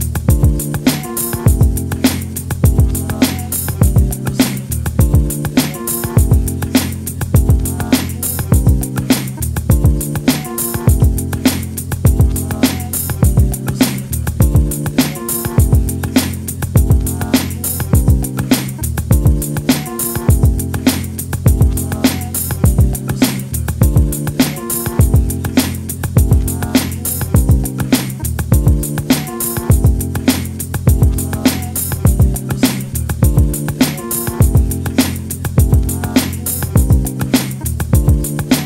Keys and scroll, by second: 37.8 shift+space.